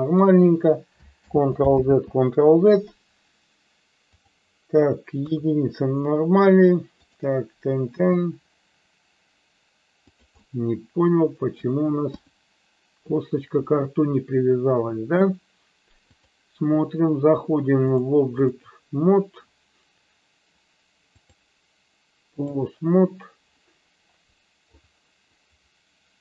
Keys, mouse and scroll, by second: 1.3 ctrl+z, 4.1 click, 5.1 KP_3, 7.9 r, 10.4-11.5 middle drag, 12.1 KP_1, 16.1-17.3 drag, 17.9 click, 21.1-22.5 drag, 24.6 click.